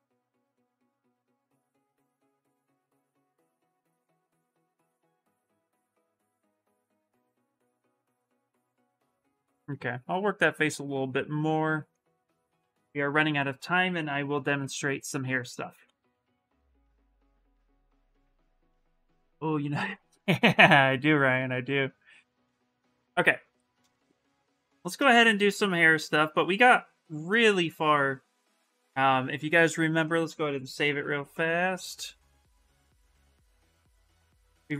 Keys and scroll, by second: 5.1 shift+f, 14.1 Return, 14.7 Return, 30.7 Return, 31.1 Return, 33.2 shift+f, 33.6 shift+f, 34.0 shift+f, 34.6 shift+f.